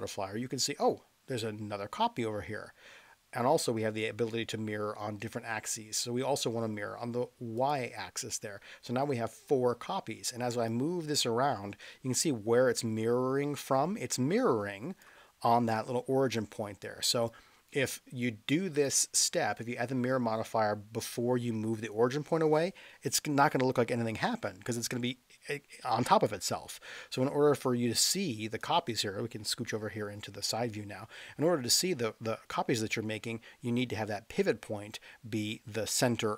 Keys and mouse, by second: 7.6 click, 10.7-15.0 drag, 17.2-18.8 drag, 26.7 click, 28.8-29.6 middle drag, 34.4-35.6 middle drag.